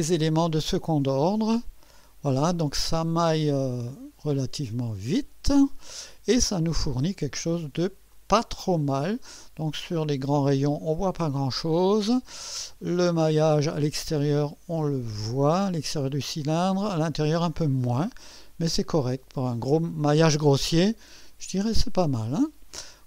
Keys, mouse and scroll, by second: 1.9 click, 6.5 scroll down 2, 8.1-13.0 drag, 13.3 scroll up 1, 17.8-22.4 drag.